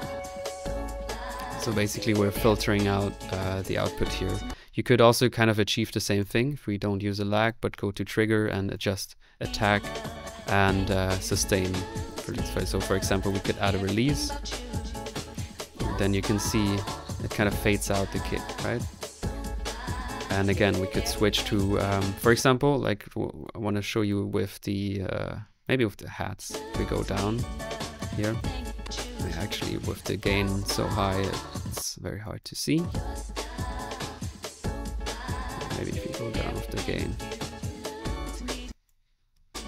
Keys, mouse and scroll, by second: 0.4 click, 4.3 space, 11.0 click, 13.8 middle click, 15.3 click, 16.4 middle click, 16.8 click, 18.5 click, 19.1-20.4 middle drag, 20.4 click, 21.5 click, 21.8 click, 21.9-26.6 middle drag, 22.2 space, 26.6-28.7 drag, 28.4-29.2 typing, 29.0 click, 30.5 click, 31.6 space, 38.4 click, 38.5 space, 39.3 middle click.